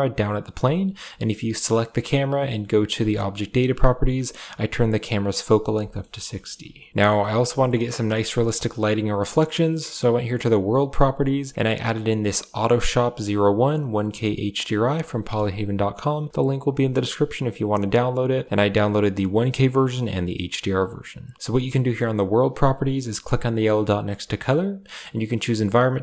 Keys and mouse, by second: 0.7 g, 3.0 click, 7.2-7.8 middle drag, 8.0-8.4 middle drag, 11.9-16.5 drag, 18.4-20.7 drag, 23.5-26.0 drag.